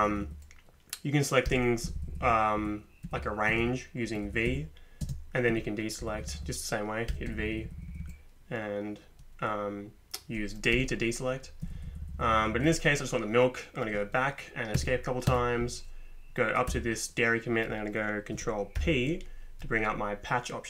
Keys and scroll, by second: 0.0 Up, 0.1 Up, 1.5 v, 1.8 Down, 2.0 Down, 2.1 Down, 2.2 Down, 2.6 Down, 3.0 Up, 3.2 Up, 3.5 Down, 4.3 Up, 4.5 Down, 5.0 space, 5.5 Down, 6.0 Up, 6.3 Up, 6.4 Up, 7.1 v, 7.3 Up, 7.8 Up, 7.9 Up, 10.7 d, 11.6 Down, 11.8 Down, 11.9 Down, 12.0 Down, 12.1 Down, 12.3 Down, 14.8 Escape, 15.3 Escape, 16.7 Up, 18.8 ctrl+p.